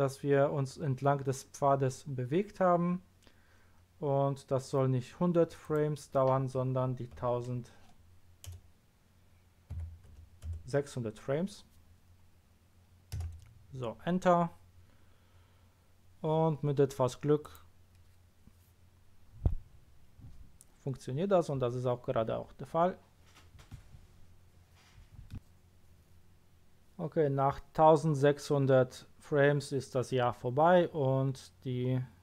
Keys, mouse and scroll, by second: 5.6 click, 7.1 KP_1, 7.5 KP_Add, 9.7 KP_6, 10.1 KP_0, 13.1 Return, 17.4 click.